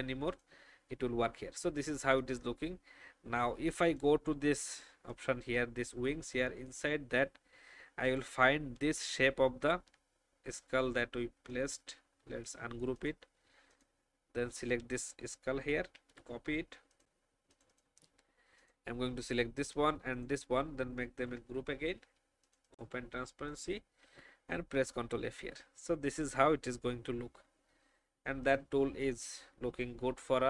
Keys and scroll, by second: 15.9 ctrl+c, 21.2 ctrl+shift+g.